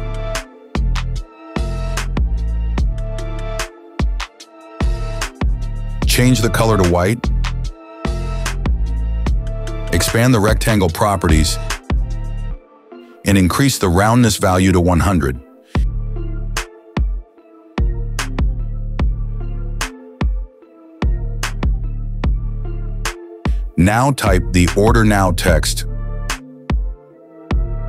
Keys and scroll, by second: 16.4 KP_0, 16.8 Return, 26.8-27.8 typing.